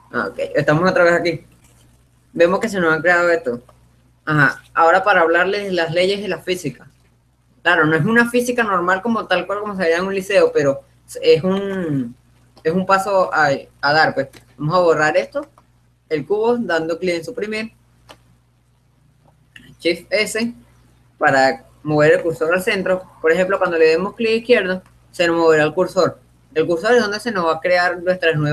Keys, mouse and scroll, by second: 3.6-6.5 middle drag, 8.4-10.8 middle drag, 10.8-12.3 right drag, 12.2-13.6 drag, 12.8-14.4 middle drag, 14.7 Delete, 17.8-20.0 middle drag, 20.5 shift+s, 23.4-27.2 drag.